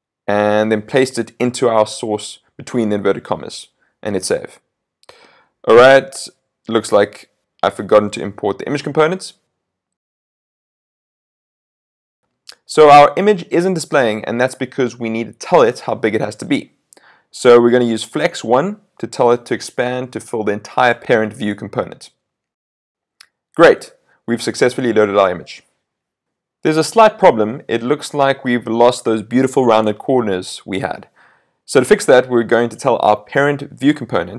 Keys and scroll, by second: 1.5 super+v, 3.0 super+s, 11.1 super+s, 22.9 super+s.